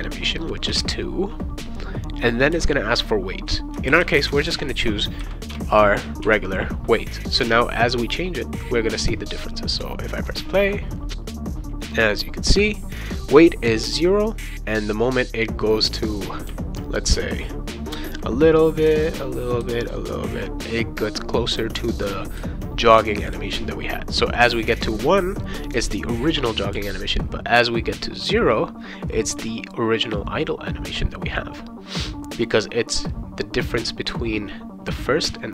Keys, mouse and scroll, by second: 0.7 2, 3.6-4.8 typing, 5.5 Return, 6.2 ctrl+s, 7.3 click, 9.0 click, 11.7 c, 15.1 v, 16.5 c, 18.1 v, 18.9 v, 19.6 v, 20.7 v, 21.6 v, 22.4 v, 23.3 v, 26.7 c.